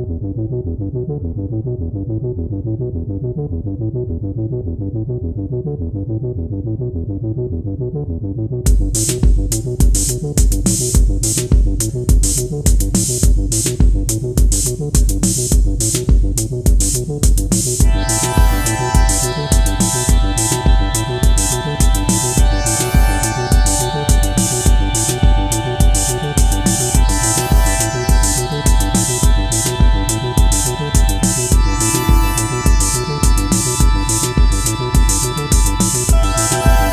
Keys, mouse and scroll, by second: 6.1 typing, 33.1 ctrl+-, 33.4 ctrl+-, 33.7 ctrl+-.